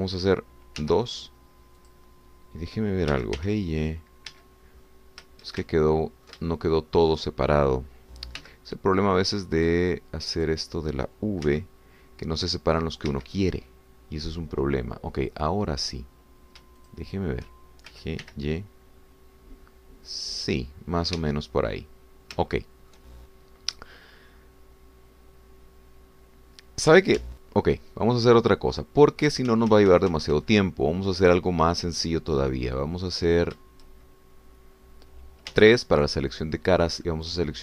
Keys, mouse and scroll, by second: 1.8 2, 2.8 click, 4.1 g, 4.4 y, 5.4 Escape, 5.8-6.1 scroll up 2, 6.7-8.7 ctrl+shift+drag, 9.5 1, 10.7 click, 11.3 click, 12.5 v, 14.1 Escape, 18.0 shift+click, 18.9 g, 19.2 y, 22.2 Escape, 22.9-23.3 scroll down 2, 23.5 shift+click, 25.3-26.0 scroll up 4, 26.4-26.7 scroll down 2, 27.1 scroll up 2, 28.2 ctrl+z, 33.6 scroll down 2, 34.2 scroll up 2, 36.6 3.